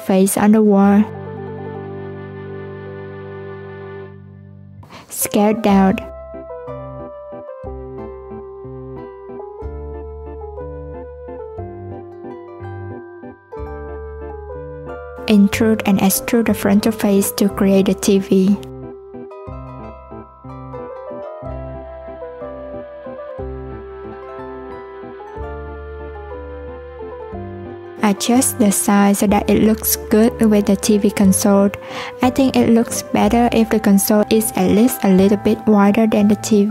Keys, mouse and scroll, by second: 0.2 shift+d, 1.7 p, 2.6 Tab, 3.0 click, 3.4 click, 4.0 right click, 6.5 s, 10.0 click, 11.8 Tab, 14.1 e, 22.1 a, 23.0 click, 23.9 Tab, 25.1 click, 25.8 scroll down 1, 26.1-26.8 scroll up 1, 26.8 click, 28.3 Tab, 29.5 alt+z, 29.8 click, 30.9 click, 33.0 click, 34.2 click, 35.8 Tab.